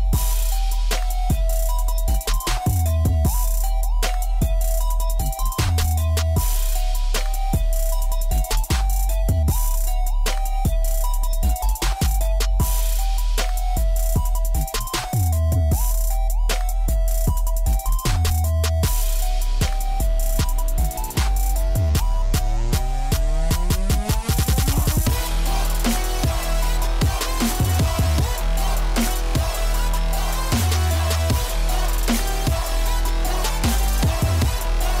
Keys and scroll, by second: 4.8 j, 14.7-17.0 typing, 17.5 Return, 21.4 a, 33.8-35.0 typing.